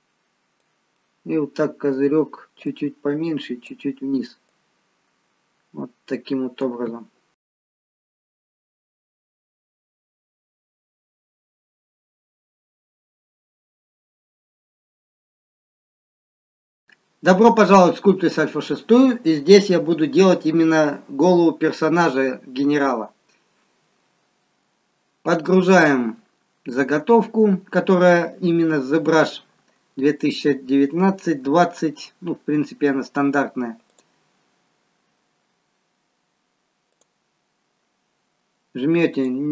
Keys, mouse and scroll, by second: 1.0 middle click, 2.8 click, 4.6 click, 7.4 middle click, 8.9 middle click, 10.5 a, 11.7 Tab, 12.3-14.0 scroll down 1, 14.0 middle click, 16.1 middle click, 16.1 scroll up 2.